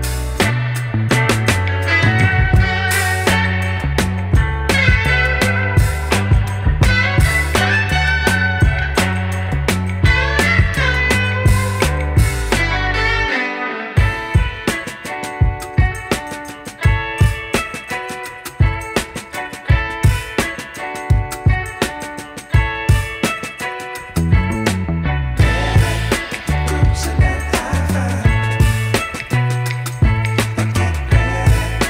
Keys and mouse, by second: 1.6 r, 2.2 click, 2.6 z, 2.8 click, 6.5 space, 6.7 click, 7.0 space, 7.2 click, 8.0 space, 8.2 click, 8.5 space, 8.8 click, 10.3 space, 10.5 click, 10.8 space, 12.8 click, 13.9 space, 14.0 click, 14.8 space, 15.0 click, 18.0 ctrl+Num_Lock, 18.0 click, 18.1 ctrl+click, 19.2 ctrl+alt+shift+e, 20.9 space, 21.1 click, 21.4 space, 21.9 a, 24.1 j, 26.1 click.